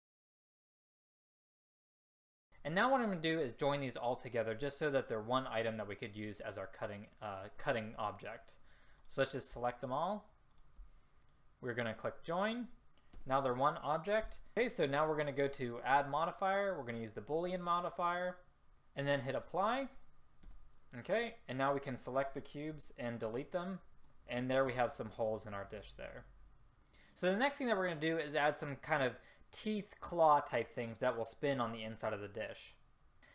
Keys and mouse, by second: 0.0-2.3 typing, 9.1-12.0 drag, 13.2 Return, 14.3 a, 16.0-17.5 drag, 19.4 click, 20.5 Return, 22.9 Delete.